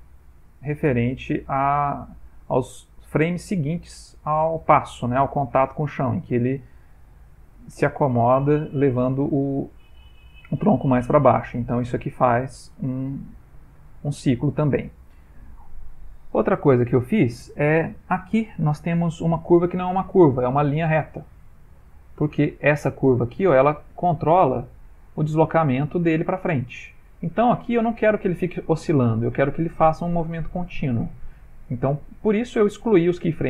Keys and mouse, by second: 1.4 click, 1.8 g, 18.5 ctrl+middle click, 19.7 middle click, 20.6 ctrl+middle click, 21.4 ctrl+middle click, 21.9 ctrl+middle click, 21.9 ctrl+middle click, 22.8 ctrl+middle click, 22.8 click, 23.9 middle click, 24.8 click, 25.3 g, 31.7 click.